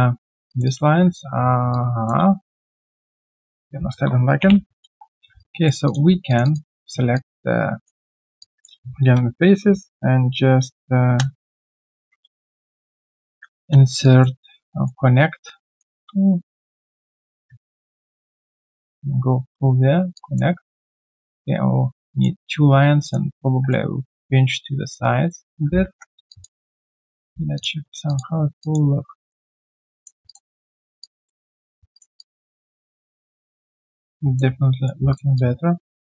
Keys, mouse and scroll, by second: 0.6 double click, 1.3 alt+scroll down 1, 1.7 alt+click, 2.6 shift+click, 4.4 ctrl+Delete, 5.2 q, 5.4 right click, 6.3 shift+click, 6.4 shift+double click, 7.1 alt+click, 13.2 ctrl+alt+q, 14.0 alt+click, 14.7 alt+middle click, 15.6 alt+click, 16.1 middle click, 19.9 middle click, 20.1 alt+click, 21.3 middle click, 26.2 3, 26.3 alt+click, 26.9 right click, 27.8 typing, 27.8 alt+scroll down 1, 28.0 alt+click, 28.3 alt+scroll down 1, 28.6 alt+click, 29.0 alt+scroll down 1, 29.3 alt+middle click, 29.6 alt+click, 31.0 alt+click, 32.6 alt+click, 32.6 alt+middle click, 32.9 alt+click, 34.6 right click, 34.9 q, 35.3 alt+click.